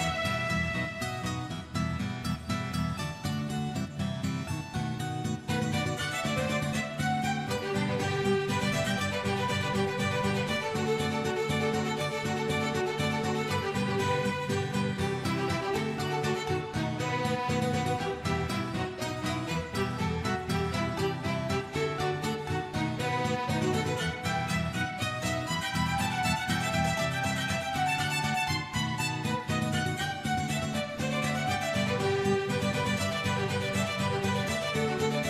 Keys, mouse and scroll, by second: 0.0 scroll down 2, 0.2 shift+middle click, 0.5 click, 1.4 space, 3.3 space, 3.5 click, 4.3-5.3 drag, 4.3-4.7 scroll, 5.8 click, 6.3 scroll down 1, 6.4 middle click, 7.2 click, 7.8 KP_Decimal, 8.0-9.3 middle drag, 9.5 click, 11.2 space, 11.8 space, 12.1-12.4 drag, 12.9 click, 14.0 click, 14.9 click, 16.4-17.0 drag, 17.1 click, 17.5 g, 18.4 click, 19.0 g, 19.5 g, 20.2 click, 20.3 g, 20.8 click, 21.0 g, 22.3 click, 22.6 shift+middle click, 22.9-23.4 scroll up 7, 23.2 click, 24.2 KP_Decimal, 24.3 scroll down 1, 24.5 shift+middle click, 24.7 scroll up 1, 24.8 middle click, 25.0 shift+middle click, 25.3 click, 26.2 click, 27.0 click, 27.8 a, 28.1 i, 28.6-29.8 drag, 29.9 space, 30.9 space, 31.9 drag, 32.2 space, 32.4 space, 32.6 click, 34.2 click, 34.6 a, 34.8 click, 35.1 shift+d.